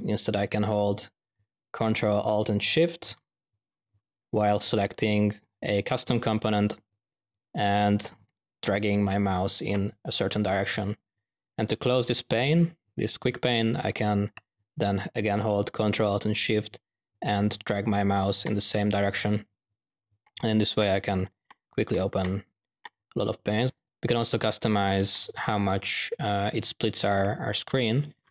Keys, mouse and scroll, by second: 1.2-1.6 drag, 1.7 click, 4.1-4.7 drag, 5.3-5.7 drag, 5.7 click, 23.7 click, 27.7 click.